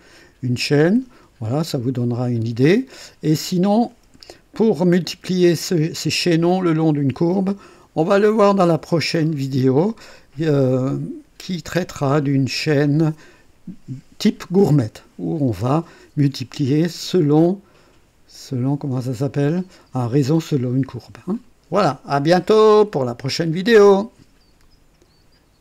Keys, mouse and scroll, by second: 1.7 click, 3.0-3.7 right drag, 10.7-13.6 drag, 19.0 click, 21.3 click, 22.3-23.4 right drag, 24.6 right click.